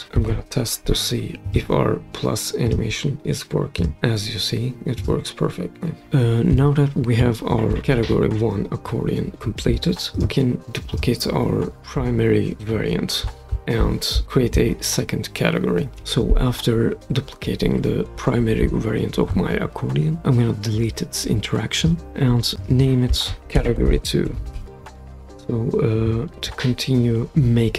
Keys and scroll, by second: 0.1 super+p, 15.9 super+d, 23.1-25.1 typing.